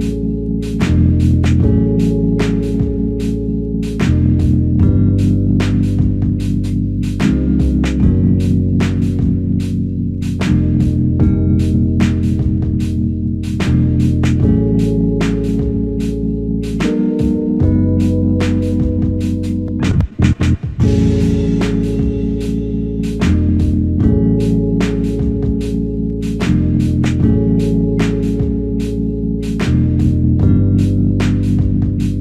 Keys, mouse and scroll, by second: 3.6 w, 5.2-5.9 scroll down 1, 6.0-6.9 scroll up 1, 6.9 middle click, 9.3 ctrl+Tab, 11.0 typing, 13.8-14.3 scroll down 1, 14.3 scroll up 1, 14.8 typing, 25.4 typing.